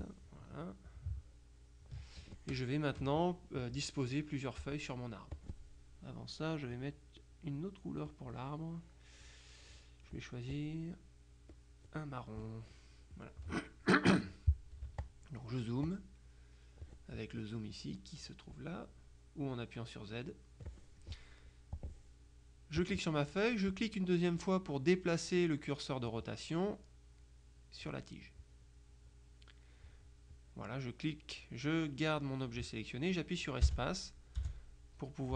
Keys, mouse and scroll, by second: 1.3 ctrl+click, 5.4 click, 8.2-10.6 drag, 11.6 click, 13.1 click, 14.9 z, 15.1 click, 16.0 click, 16.3 right click, 18.6 click, 21.8 click, 22.9 click, 23.8 click, 26.2-28.4 drag, 33.7 space, 34.5 space.